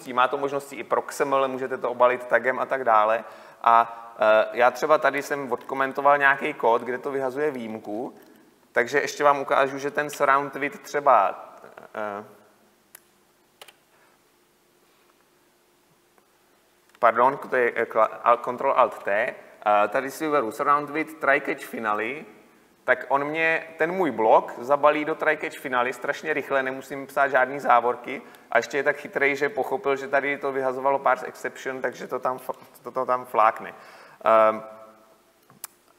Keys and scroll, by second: 10.8 alt+Insert, 19.1 ctrl+alt+t, 22.3 ctrl+alt+t.